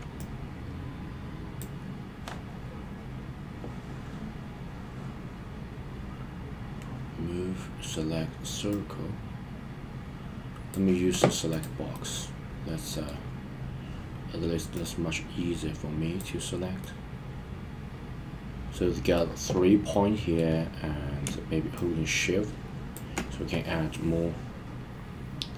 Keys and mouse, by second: 8.7-10.7 drag, 11.9-13.1 middle drag, 14.8-16.2 drag, 16.8-19.2 middle drag, 19.9-20.4 middle drag, 21.7 shift+click, 22.0-22.9 shift+drag, 23.9-25.5 middle drag.